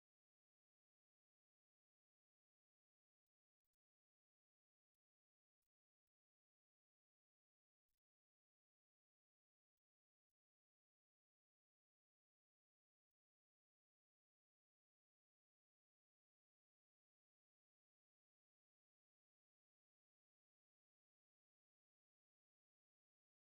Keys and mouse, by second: 0.2 middle click, 0.9 alt+middle click, 1.5 shift+middle click, 3.2 click, 3.9 alt+middle click, 4.5 click, 6.5 middle click, 8.5 click, 9.8 middle click, 10.5 middle click, 11.8 middle click, 13.0 middle click, 13.9 click, 16.4 middle click, 17.7 middle click, 19.8 click, 23.1 middle click.